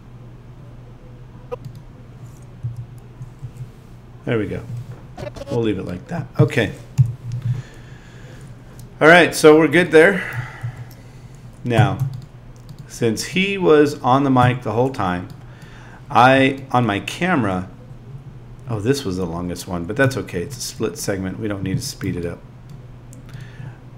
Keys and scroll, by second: 2.6 •, 7.0 Home.